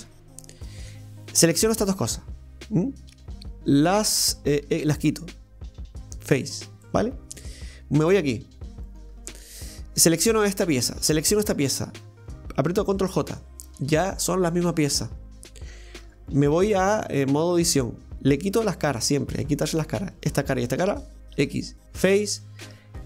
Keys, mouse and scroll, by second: 1.3 right click, 1.8 shift+right click, 4.7 x, 6.8-7.9 middle drag, 7.9 right click, 8.9 right click, 9.1 Tab, 9.4 right click, 11.2 shift+right click, 13.1 ctrl+j, 16.3 right click, 18.7 shift+right click, 19.4 middle click, 20.1 shift+right click, 21.4 x, 22.4-23.0 middle drag.